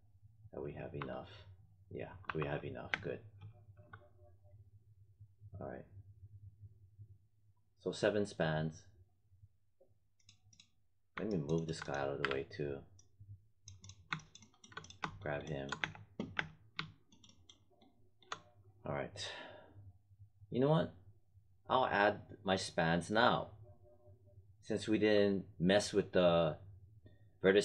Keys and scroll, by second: 0.9 4, 2.2 5, 2.8 space, 12.1 w, 15.7 space.